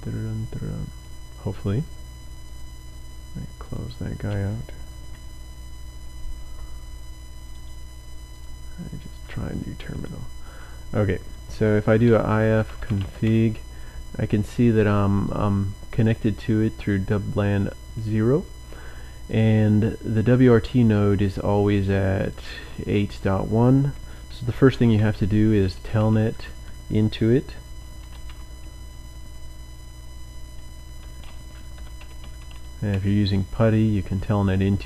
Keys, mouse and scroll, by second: 2.6 click, 3.5 click, 7.6 right click, 8.4 click, 9.9-10.8 drag, 11.7-13.6 typing, 15.2 click, 19.2 click, 21.2 click, 23.0 click, 24.5-28.7 typing, 29.8 typing, 30.9-32.9 typing.